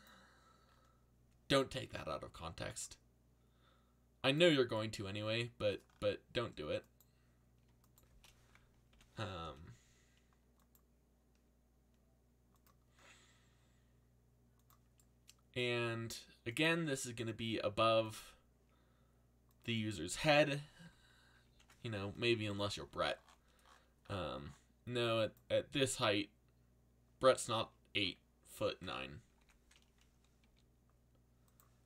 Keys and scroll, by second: 1.7 a, 8.9 ctrl+l, 21.4 ctrl+l, 29.4 z, 30.4 r.